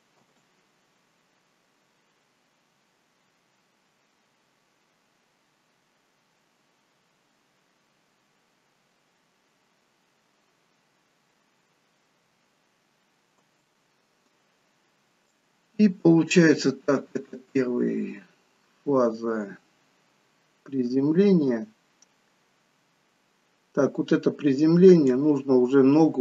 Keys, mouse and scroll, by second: 0.2 space, 13.6 space, 15.5 click.